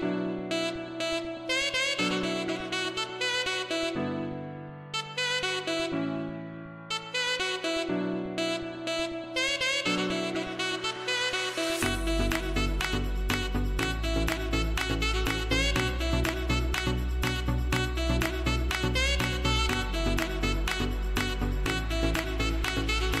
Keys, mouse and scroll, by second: 0.4-1.6 scroll down 1, 2.2 scroll up 1, 3.2-7.4 typing, 4.1 click, 6.6 click, 7.5 click, 8.1 scroll down 1, 10.9 scroll up 1, 11.4 scroll down 1, 14.0 space, 14.2 click, 14.6 space, 16.6 o, 17.0 scroll up 1, 17.8-23.2 typing, 18.2 click, 18.7 click, 19.5 click, 19.9 click, 20.2 scroll down 1, 21.0 click, 21.5 click, 22.0 click, 22.6 click, 22.7 click.